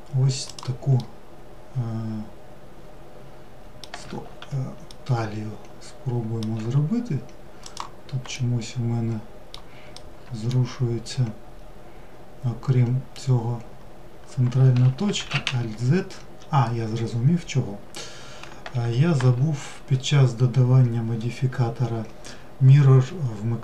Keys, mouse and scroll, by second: 3.9-5.5 middle drag, 5.5 s, 7.3 alt+middle click, 8.9 alt+middle click.